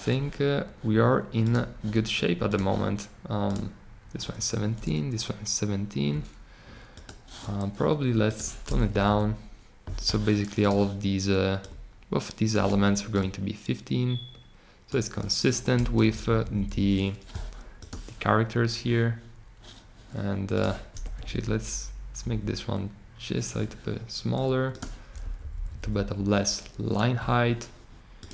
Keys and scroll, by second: 8.9 Down, 15.9 Up, 16.2 Up, 16.3 Up, 16.5 Up, 16.7 Up, 21.1 Down, 22.2 Up, 25.2 Down, 25.4 Down, 25.5 Down, 25.6 Down, 25.8 Down.